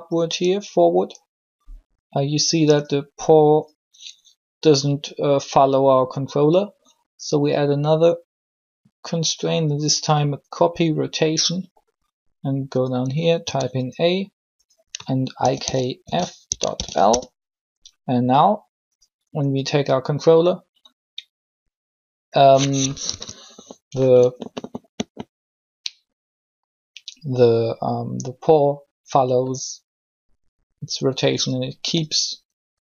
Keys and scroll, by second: 13.2 a, 15.4 shift+i, 15.6 shift+k, 15.9 shift+f, 16.7 shift+l, 17.0 Return, 23.1 3.